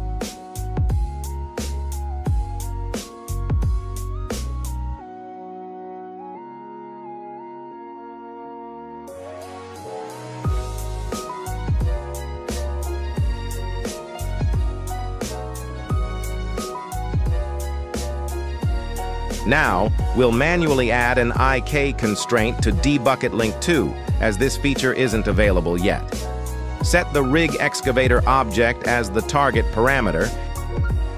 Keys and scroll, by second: 0.5 n, 4.0 z, 7.4 g, 9.8 Escape, 11.6 z, 12.2 r, 12.4 x, 15.3 Escape.